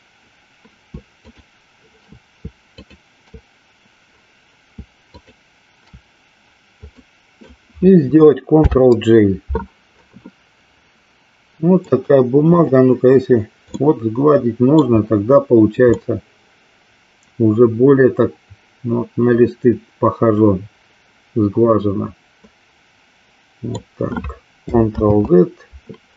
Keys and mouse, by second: 1.2 shift+click, 2.7 shift+click, 5.0 shift+click, 7.0 middle click, 11.7-12.7 right drag, 13.7-14.9 middle drag, 16.0-23.7 middle drag.